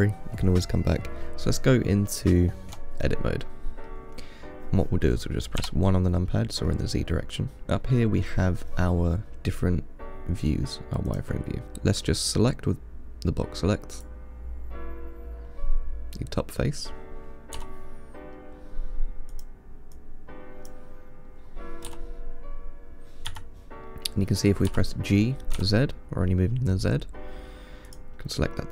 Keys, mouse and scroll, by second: 2.9 Tab, 3.7-5.8 middle drag, 5.8 KP_1, 6.9-7.6 scroll up 3, 7.6-9.6 scroll up 1, 11.6 click, 12.4 click, 14.3-17.3 drag, 17.8 g, 19.6 click, 20.2 click, 22.1 g, 24.9 g.